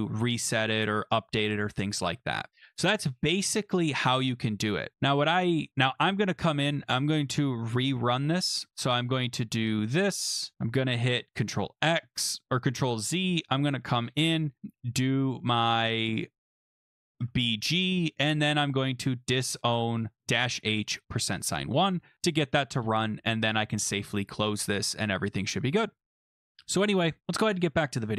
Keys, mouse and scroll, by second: 2.5 Up, 4.1 Up, 4.9 Up, 5.9 Return, 6.6 Up, 7.1 Up, 8.7 Up, 9.6 Return, 10.4 shift+Return, 11.4 ctrl+x, 11.9 Up, 12.0 ctrl+z, 13.5 Up, 14.8 Up, 15.3 Down, 16.5 Up, 17.2 shift+Return, 18.0 Up, 18.4 Up, 18.7 Up, 20.6 Return, 22.0 Up, 23.5 click.